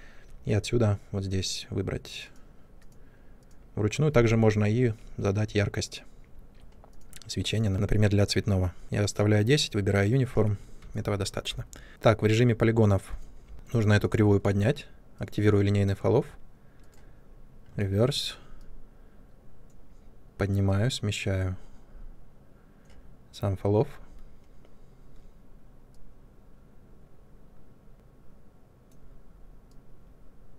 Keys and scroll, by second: 13.4 w.